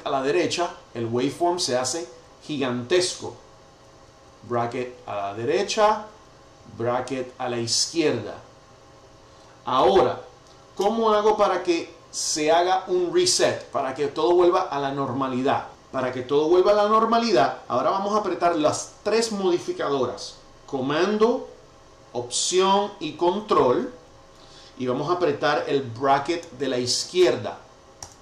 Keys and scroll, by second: 3.8 alt+super+[, 6.5 alt+super+], 15.6 alt+super+], 28.0 ctrl+alt+super+[.